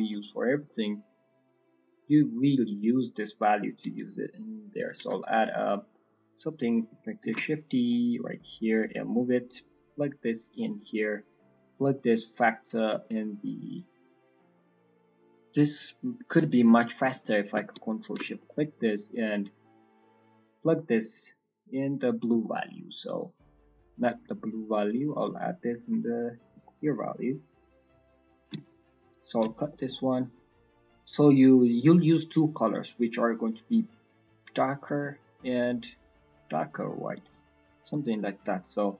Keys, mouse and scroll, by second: 0.0 middle click, 0.2-1.7 scroll up 8, 0.6 middle click, 2.0 click, 5.3 middle click, 5.8 middle click, 6.5 click, 7.2 shift+d, 8.7 click, 10.8 middle click, 16.1 click, 16.1-16.6 scroll down 12, 16.6-17.3 scroll up 9, 17.3 middle click, 18.0 ctrl+shift+click, 18.2 ctrl+shift+click, 18.4 middle click, 18.6-19.2 scroll up 4, 19.2 middle click, 20.4 click, 22.4 middle click, 22.7-23.4 scroll up 2, 23.4 scroll up 1, 24.7 click, 26.8 ctrl+right click, 26.9 ctrl+right click, 27.7 ctrl+right click, 28.1 ctrl+right click, 28.7 ctrl+right click, 29.1 ctrl+right click, 29.6 middle click, 29.9-30.3 scroll up 5, 31.0 scroll up 4, 32.5 click, 35.4 click, 37.8 click, 38.7 click.